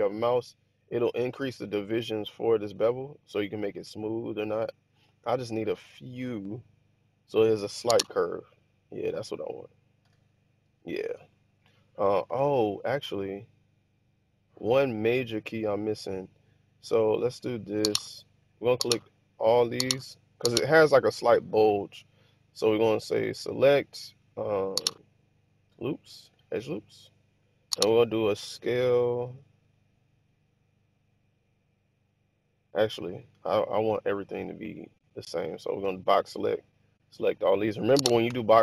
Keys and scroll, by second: 7.8 Tab, 9.9 1, 12.2 Tab, 29.2 s, 32.8 `, 32.8 Escape, 33.1 Escape, 35.8 b, 38.3 b.